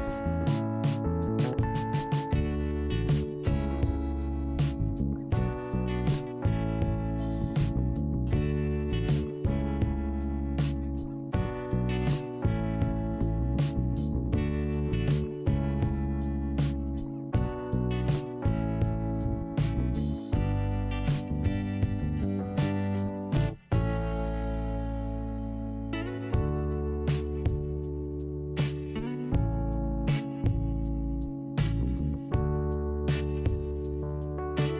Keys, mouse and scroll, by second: 0.6 click, 0.7 click, 2.1 click, 2.2 click, 3.0 click, 7.1 scroll up 1, 8.3 scroll up 1, 9.9 click, 12.9 scroll down 1, 13.9 p, 15.0 click, 16.2 scroll up 2, 17.1 click, 17.2 click, 19.3 scroll down 1, 20.6 click, 20.8 click, 22.2 click, 25.7 scroll up 1, 28.8 click, 28.9 click, 29.0 click, 29.0 click, 29.5-30.1 scroll down 1, 30.6 click, 30.7 click, 32.1 click, 33.0 click, 33.1 click, 34.2 click.